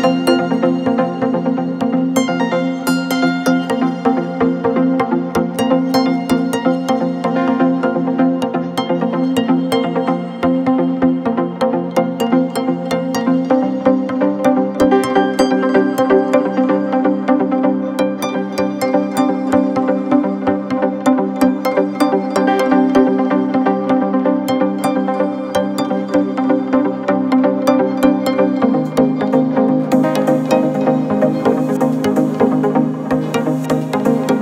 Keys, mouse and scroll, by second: 3.4-7.6 drag, 7.9-9.3 drag, 10.2-13.2 right drag, 13.2-17.7 drag, 19.1 click, 20.1 Tab, 21.9-24.9 drag, 28.5 click, 29.5 click, 30.9 click.